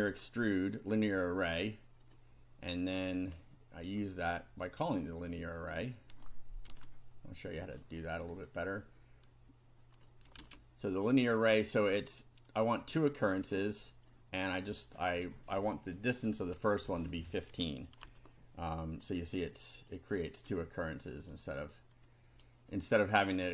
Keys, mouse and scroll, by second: 2.1 click, 3.3-4.0 scroll up 4, 4.7-6.1 drag, 6.7 ctrl+c, 7.6 click, 8.3 click, 10.0 click, 10.4 ctrl+v, 11.8 click, 14.1 click, 18.0 F5, 18.7 click, 19.3-20.1 drag, 20.8-21.1 scroll down 2, 21.4-22.6 right drag.